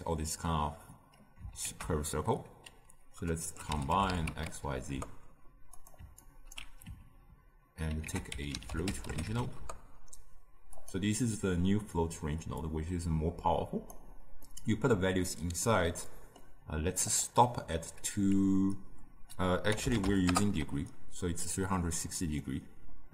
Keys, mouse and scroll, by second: 6.5-9.5 alt+right drag, 9.5 ctrl+a, 13.9-14.5 drag, 14.5-20.2 middle drag, 22.4-23.1 middle drag.